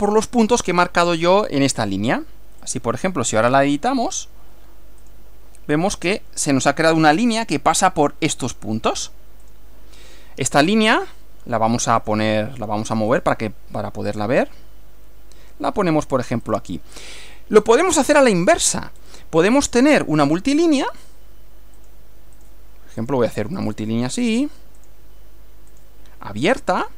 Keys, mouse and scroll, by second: 2.7 click, 5.1 click, 9.5 click, 12.0 click, 13.1 click, 14.1 click, 16.5 click, 17.2 scroll down 1, 18.1-18.9 shift+middle drag, 20.7 click, 21.8 click, 22.4 click, 23.1 click, 23.6 click, 24.2 click, 24.8 click, 25.7 click.